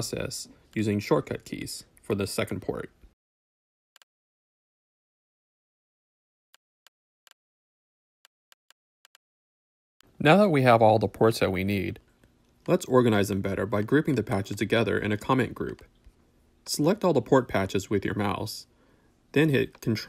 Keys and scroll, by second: 1.0 alt+p, 2.6 shift+Return, 2.7-4.5 typing, 5.2 shift+Return, 5.5-6.4 typing, 7.8 w.